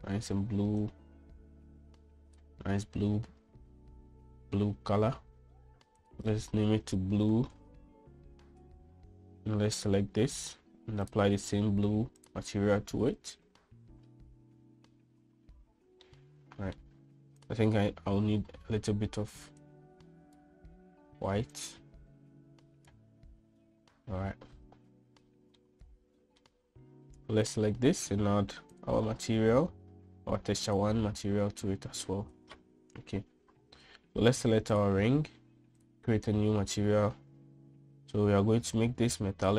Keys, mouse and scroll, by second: 6.9-9.7 drag, 12.1-13.2 drag, 17.0-17.7 middle drag, 20.5-21.4 drag, 22.5-23.9 drag, 26.6-27.3 middle drag, 28.3 click, 29.8-31.8 drag, 36.7 click.